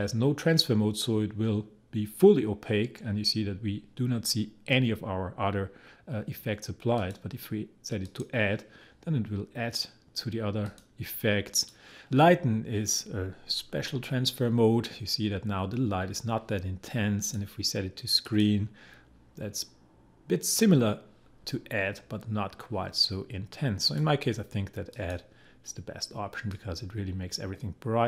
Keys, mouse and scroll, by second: 7.0 click, 17.2 click, 23.8-28.0 drag.